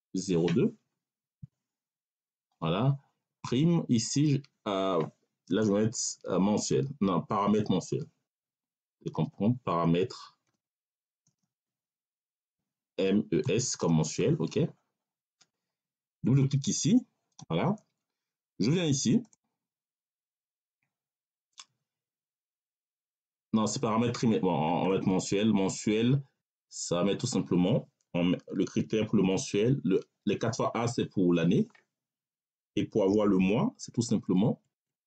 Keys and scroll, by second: 1.3 0, 1.9 2, 5.4 space, 7.3-11.3 typing, 12.3 m, 12.8 e, 13.3 n, 13.7 s, 34.1 BackSpace.